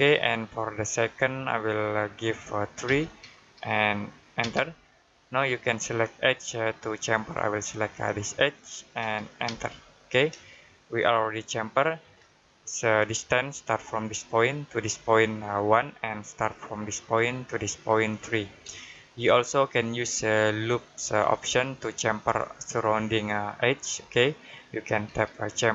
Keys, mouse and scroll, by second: 2.7 3, 4.3 space, 8.3 click, 9.3 space, 10.6 middle click, 18.6 shift+Num_Lock, 19.0 middle click, 21.6 middle click.